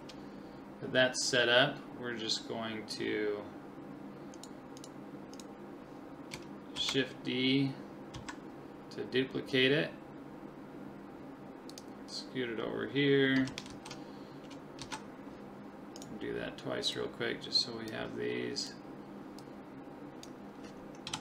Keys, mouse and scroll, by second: 4.4-7.3 right drag, 6.8 shift+d, 13.7 shift+r, 14.8 shift+r, 16.0-17.5 right drag, 16.9 click, 17.8 click, 18.7-20.3 right drag, 19.4-21.1 drag, 21.1 KP_7.